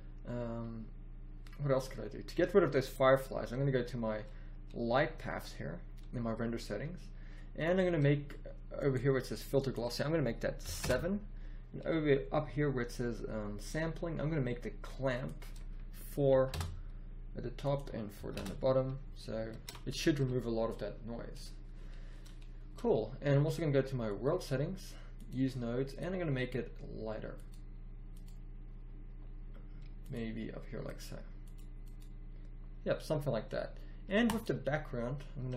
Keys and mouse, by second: 2.4-6.4 drag, 7.6-11.8 drag, 19.6 shift+z, 24.1-29.2 drag, 30.0-32.3 drag, 34.3-35.5 drag.